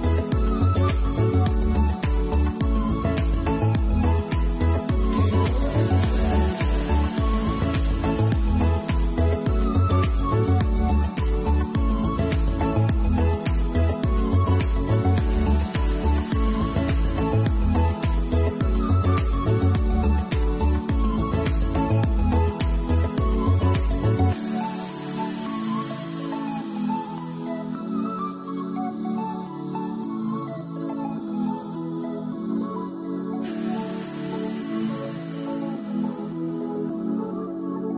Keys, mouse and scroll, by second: 0.0 Tab, 0.0 ctrl+r, 0.0 shift+middle click, 0.8 shift+middle click, 2.0 alt+q, 2.5 middle click, 3.6-3.9 scroll up 6, 5.3 middle click, 6.2 shift+click, 6.6-6.9 scroll down 3, 7.5 shift+click, 7.9 scroll down 2, 8.2 shift+middle click, 8.4 shift+middle click, 9.7 alt+shift+click, 10.3 middle click, 11.5-12.2 scroll down 1, 12.2 middle click, 13.0 alt+shift+click, 13.5 middle click, 14.2 scroll down 1, 15.4 alt+shift+click, 15.6 middle click, 16.1 shift+middle click, 17.1-17.5 scroll down 2, 17.5 middle click, 20.3 shift+middle click, 21.1 ctrl+e, 23.1 a, 24.0 u, 24.2 u, 26.4 middle click, 28.6 shift+middle click, 29.1 middle click, 31.1 middle click, 36.1 click, 37.4 h.